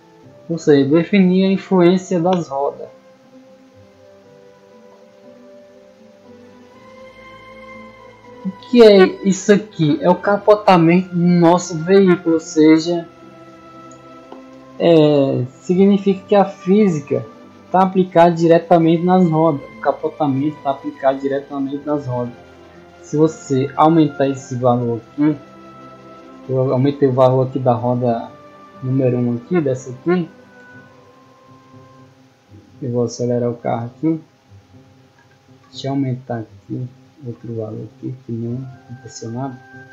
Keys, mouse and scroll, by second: 24.1 click, 27.7-28.2 middle drag, 29.0 right click, 29.5 middle click, 30.8-31.8 typing, 33.1 a, 37.6 click.